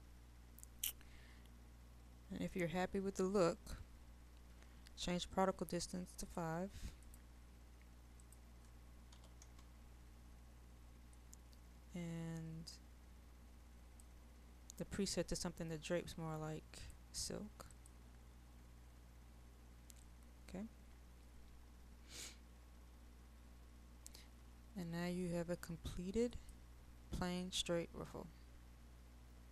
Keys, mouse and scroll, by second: 15.9 click.